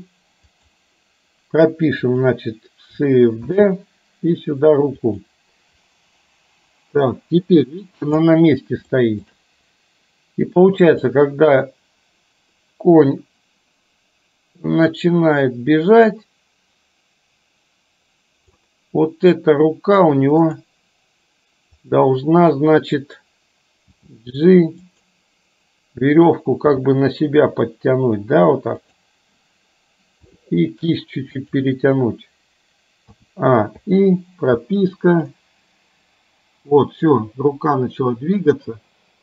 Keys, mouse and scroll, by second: 2.0 click, 3.5 shift+d, 5.9-8.4 drag, 9.0 shift+middle drag, 11.2-18.7 drag, 20.4 click, 21.9 click, 23.9 g, 26.8 g, 30.3 r, 33.2 a, 33.8 i, 35.4-39.2 drag.